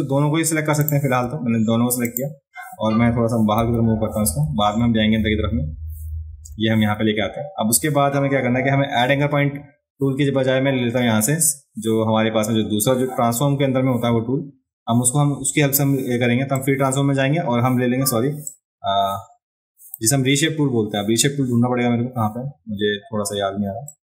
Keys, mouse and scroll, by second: 0.8 click, 0.8 right click, 2.1 shift+click, 16.6-18.0 drag, 18.5-19.9 drag, 23.9-24.0 drag.